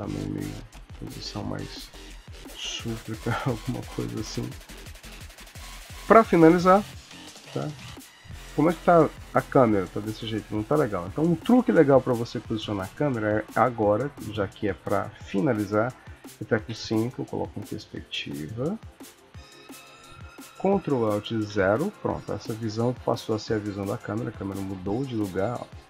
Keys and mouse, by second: 1.0 r, 1.3 click, 1.5 r, 2.5 r, 4.4 ctrl+middle click, 4.7 ctrl+middle click, 5.3-7.8 ctrl+middle click, 5.9 ctrl+s, 6.2 middle click, 8.7 KP_0, 11.0 KP_0, 11.9 middle click, 15.3 ctrl+middle click, 16.6 KP_5, 17.4 middle click, 18.7 ctrl+middle click, 19.3 shift+middle click, 21.4 ctrl+alt+KP_0, 24.3 KP_0, 24.9 middle click.